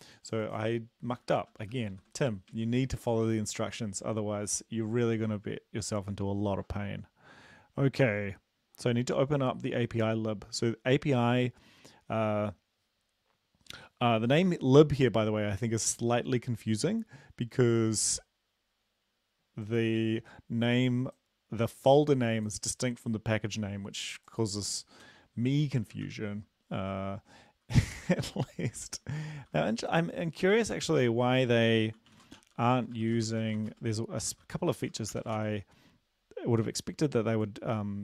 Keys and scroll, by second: 1.6 shift+Home, 2.0 ctrl+x, 2.6 ctrl+s, 25.1 Return, 26.1 ctrl+v, 27.8 shift+Home, 28.3 BackSpace, 29.0 shift+End, 29.4 ctrl+v, 30.4 Home, 30.7 Return, 31.0 Up, 32.0-35.2 typing, 35.4 ctrl+s.